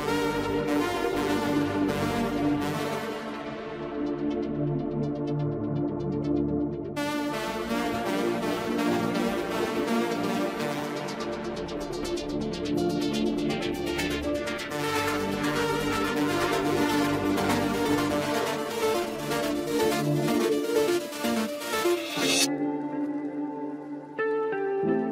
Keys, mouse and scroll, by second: 3.6-4.2 scroll down 6, 4.2-5.0 middle drag, 5.0-5.3 scroll up 2, 5.7-6.2 scroll up 8, 6.2-8.7 middle drag, 8.7-11.8 drag, 14.6-14.9 scroll down 1, 14.9-16.1 middle drag, 16.1-16.5 scroll up 3, 16.8-18.4 middle drag, 18.4-20.0 scroll down 10, 20.0-23.0 middle drag, 23.0-25.1 drag.